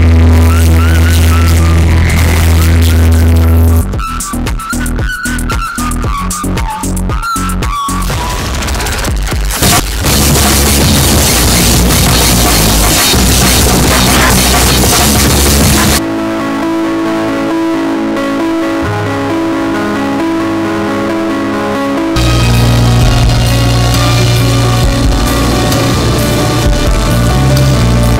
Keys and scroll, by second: 4.5 Page_Down, 16.1 Page_Down.